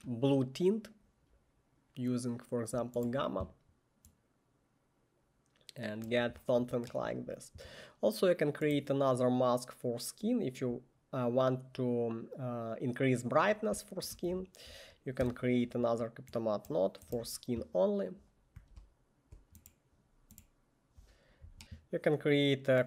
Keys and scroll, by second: 14.2 Tab, 17.2 Return, 17.2 1, 21.3-22.1 typing.